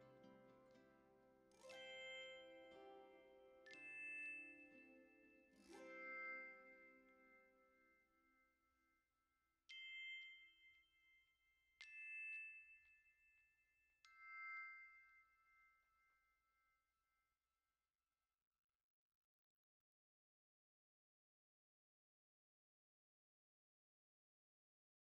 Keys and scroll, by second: 2.0 ctrl+space.